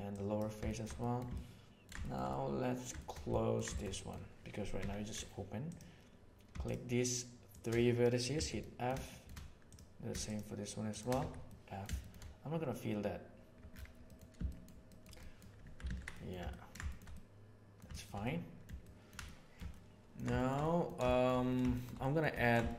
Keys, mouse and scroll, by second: 0.7 shift+middle click, 1.0 middle click, 1.3 ctrl+middle click, 2.0 shift+middle click, 2.2 middle click, 3.0 shift+middle click, 3.3 ctrl+middle click, 3.7 shift+middle click, 3.9 middle click, 4.8 2, 8.3 f, 8.6 middle click, 9.0 shift+middle click, 11.2 f, 11.4 middle click, 12.0 shift+middle click, 14.0 middle click, 14.4 shift+middle click, 14.8 shift+middle click, 15.2 middle click, 15.5 Tab, 15.8 alt+a, 16.1 middle click, 16.4 ctrl+middle drag, 16.8 shift+middle click, 17.1-17.7 middle drag, 17.9 shift+middle click, 18.2-19.0 middle drag, 19.2-20.0 middle drag, 20.3 shift+middle click, 20.6 middle click, 21.0 shift+middle click, 21.7 shift+middle click, 22.0 middle click, 22.4 ctrl+middle click.